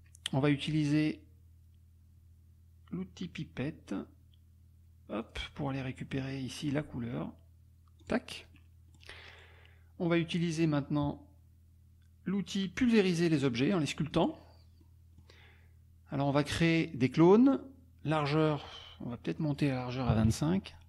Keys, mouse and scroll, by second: 5.2 click, 6.0 click, 8.0 click, 8.5 click, 14.1 click, 14.8 click, 19.4 click, 20.1 KP_2, 20.2 KP_5, 20.6 Tab.